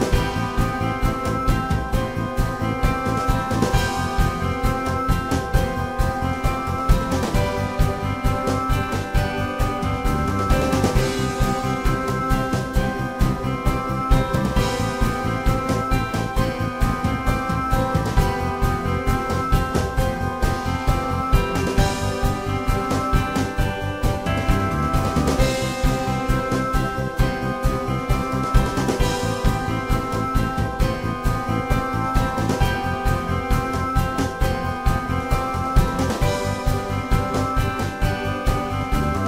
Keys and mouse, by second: 2.2 middle click, 2.9 y, 2.9-6.3 drag, 6.4-8.3 middle drag, 8.5-15.3 drag, 14.9 s, 19.6 shift+c, 19.9 f, 23.7-24.9 drag, 25.4-26.3 middle drag, 26.3 f, 26.8-31.2 drag, 28.7 f, 31.2-32.1 middle drag, 32.2 middle click, 33.0-35.4 drag, 35.7 y, 36.3 f, 36.7-39.0 drag, 38.8 s.